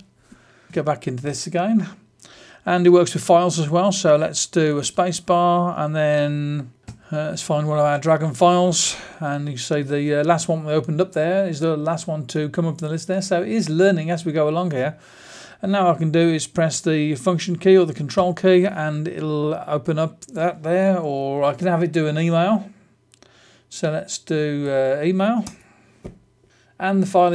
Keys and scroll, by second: 0.6 super+space, 4.7 space, 6.5-7.3 typing, 21.1 Down, 24.6 Down, 25.4 Return.